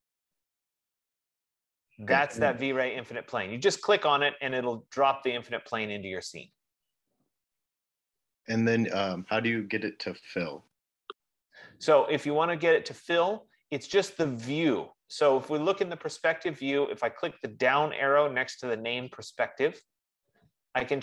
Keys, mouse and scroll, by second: 20.1-21.0 drag.